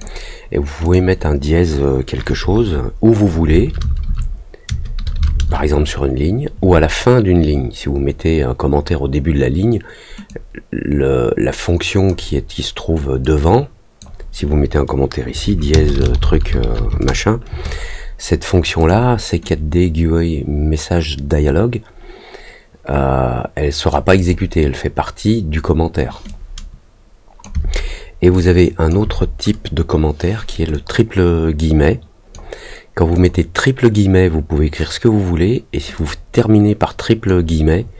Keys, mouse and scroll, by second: 0.8 click, 10.2-12.0 drag, 13.2 click, 18.7 click, 19.4-23.8 drag, 24.1 click, 26.2-27.4 drag, 28.3 click, 30.7-32.3 drag, 33.1 click, 35.9-37.2 drag.